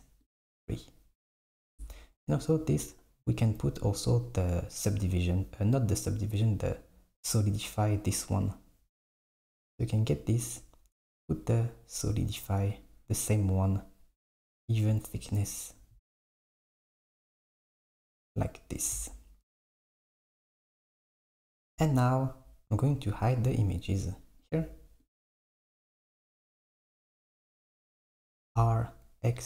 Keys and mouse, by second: 0.3-1.6 drag, 1.9 click, 3.8 click, 6.9-9.4 drag, 12.9 click, 14.7 click, 16.6 click, 17.9 click, 18.8 click, 19.7 s, 23.6-25.2 drag, 26.0 n, 27.3 click, 28.2 r.